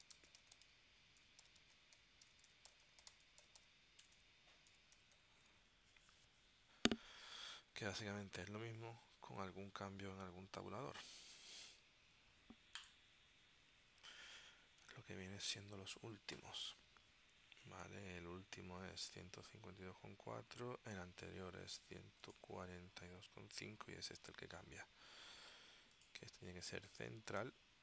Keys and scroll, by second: 0.0-5.8 typing.